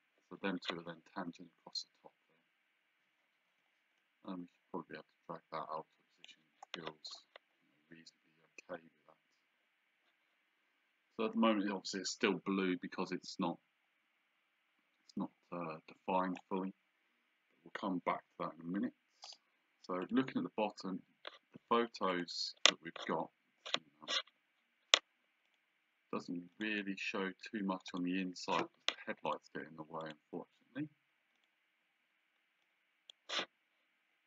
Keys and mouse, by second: 3.5 Escape, 4.0 click, 19.3 click, 22.1 click, 25.5 click, 26.5 click, 27.9 click, 29.3 click, 31.4 click, 32.6 click.